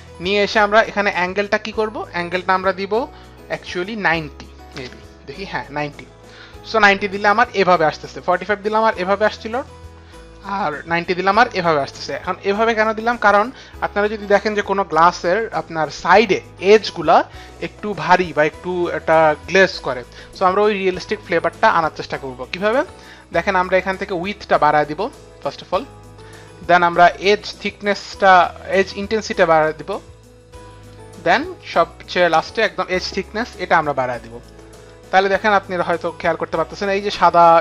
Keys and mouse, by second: 1.2 click, 3.9 KP_9, 4.0 KP_0, 4.7 Return, 24.5 click, 29.6 click, 33.5 click.